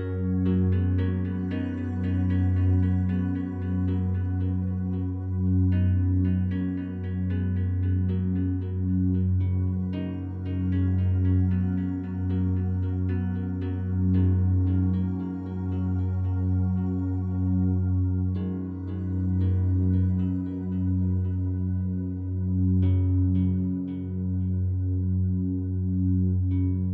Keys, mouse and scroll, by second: 0.4 click, 1.1 s, 1.4 z, 3.7 click, 4.3 scroll up 1, 5.4-6.7 scroll down 1, 11.8 scroll down 1, 12.9-18.3 alt+drag, 18.3 Tab, 19.8 ctrl+r, 21.3-21.7 scroll up 1, 25.8 click, 26.7 right click.